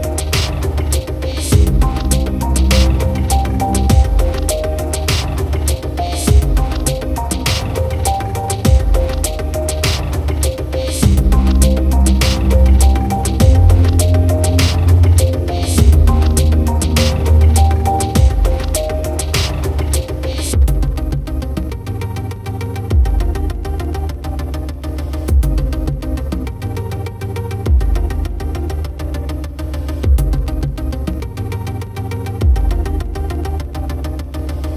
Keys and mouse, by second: 0.4 right click, 1.3 right click, 2.7 right click, 5.2 right click, 6.5 right click, 7.3 right click, 7.5 right click, 7.7 right click, 8.9 right click, 9.5 right click, 9.8 right click, 11.1 right click, 11.4 right click, 12.5 right click, 12.8 right click, 13.1 right click, 14.1 right click, 15.1 right click, 15.4 right click, 15.8 right click, 16.1 right click, 16.3 right click, 16.8 right click, 17.0 right click, 17.8 right click, 18.1 right click, 18.3 right click, 18.8 right click, 19.2 right click, 20.3 right click, 20.9 right click, 21.6 right click, 22.1 right click, 24.0 right click, 25.2 right click, 25.7 right click, 26.2 right click, 28.1 right click, 28.6 right click, 29.1 right click, 29.7 right click, 31.3 right click, 31.6 right click, 32.4 right click, 33.2 right click, 33.8 right click, 34.2 right click.